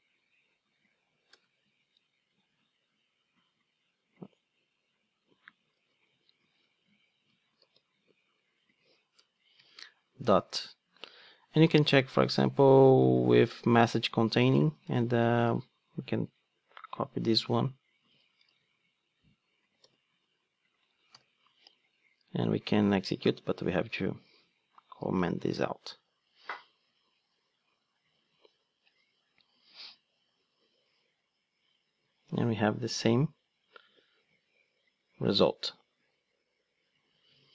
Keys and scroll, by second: 1.7 super+v, 1.8 super+z, 5.9 super+c, 6.6 super+z, 7.6 super+v, 13.8 Return, 14.9 Tab, 15.4 ctrl+Tab, 18.1 super+c, 18.5 ctrl+Tab, 19.8 super+v, 24.2 super+/, 25.0 ctrl+d.